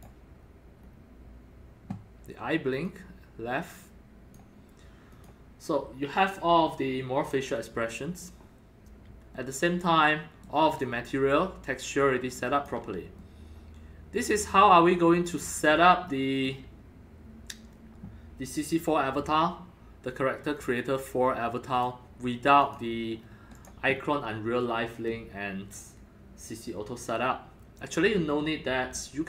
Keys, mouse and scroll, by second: 0.4 scroll up 2, 0.8 scroll down 2, 2.8-4.3 drag, 3.8 scroll, 5.1 click, 7.8 scroll down 1, 7.9-10.4 middle drag, 10.8-12.7 alt+drag, 13.3 alt+middle click, 14.4-14.9 scroll up 3, 14.9 scroll down 1, 15.7-16.7 alt+middle drag, 20.5 click, 21.7 click, 22.6 click, 23.2 scroll down 4, 23.5 click, 23.9 scroll up 3, 26.2 scroll, 27.7 scroll down 1, 29.0-29.2 alt+middle drag.